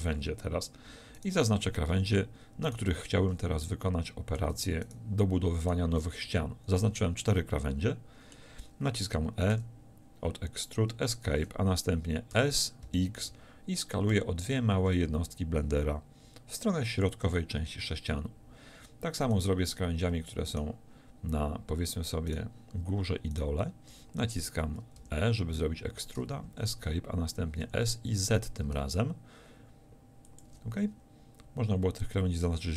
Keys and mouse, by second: 6.2 z, 9.6 e, 12.4 s, 17.1-26.5 drag, 25.0 e, 27.7 s, 30.5 click.